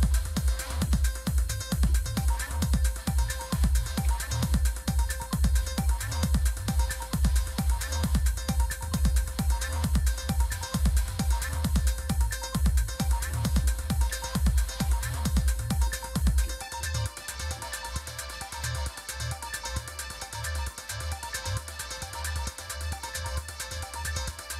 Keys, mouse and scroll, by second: 0.6-5.0 typing, 6.7 click, 9.1 click, 9.6 click, 10.9 click, 12.3 click, 13.0-18.0 typing, 19.4 click, 20.5 click, 22.9 click, 24.0 click.